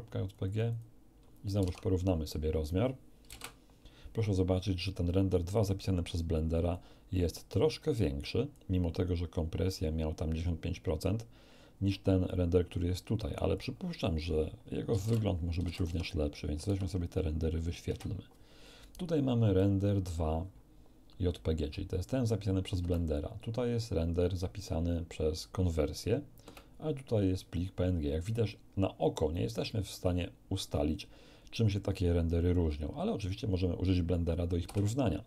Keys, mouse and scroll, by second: 0.3 click, 0.8 click, 1.9 alt+Tab, 3.2 l, 3.3 Return, 5.5-6.9 drag, 7.9 click, 12.2-13.8 drag, 14.9-16.6 typing, 15.8 Tab, 17.8 Return, 19.6 alt+click, 22.8 space, 26.4 space, 34.6 q.